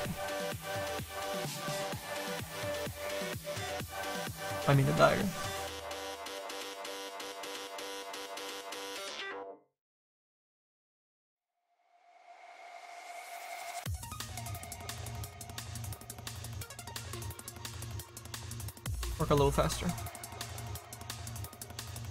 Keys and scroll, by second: 13.2 ctrl+z, 20.9 w.